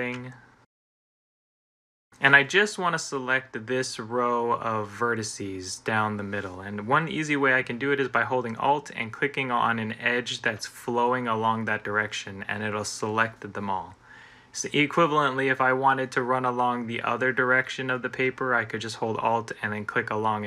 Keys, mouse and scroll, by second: 1.0-3.2 middle drag.